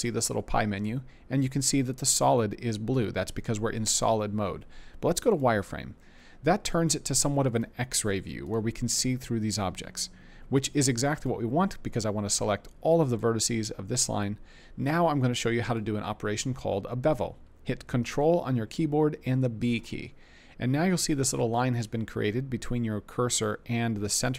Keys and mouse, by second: 19.6 ctrl+b.